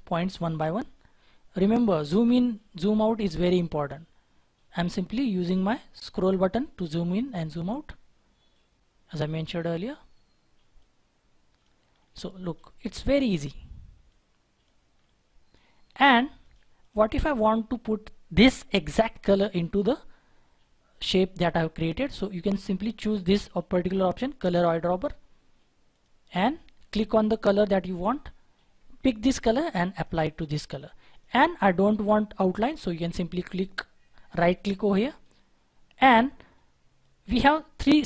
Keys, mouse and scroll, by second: 0.8-1.2 scroll down 1, 1.2 scroll up 1, 3.9-4.3 scroll down 1, 4.3-5.6 scroll up 1, 7.5-8.6 scroll down 1, 9.7-11.0 scroll up 1, 11.9 scroll down 1, 12.9-14.2 scroll up 1, 14.9-16.8 scroll down 1, 16.8 double click, 19.0-19.7 scroll down 1, 19.7 scroll down 1, 19.8-22.7 scroll up 1, 35.1 right click, 35.6-37.0 scroll down 1.